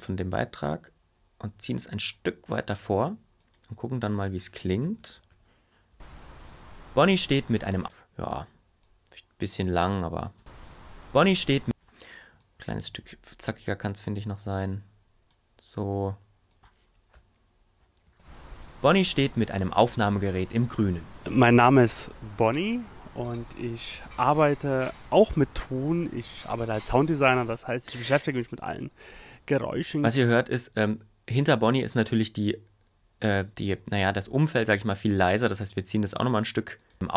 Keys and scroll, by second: 4.8 Left, 5.9 space, 7.8 space, 10.3 space, 11.6 space, 17.1 Left, 18.1 space, 30.1 space, 36.9 space.